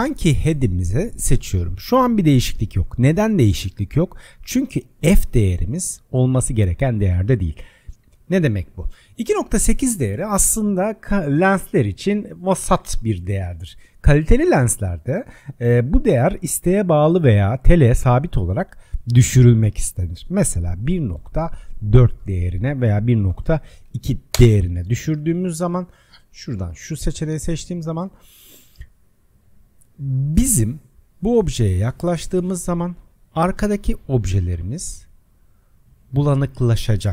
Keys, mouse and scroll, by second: 5.0-8.1 drag, 26.6 click, 31.0-32.2 scroll up 4, 32.2-34.5 shift+middle drag, 34.7-35.4 scroll up 19, 35.9-36.6 shift+middle drag, 35.9 scroll up 5, 36.6 click.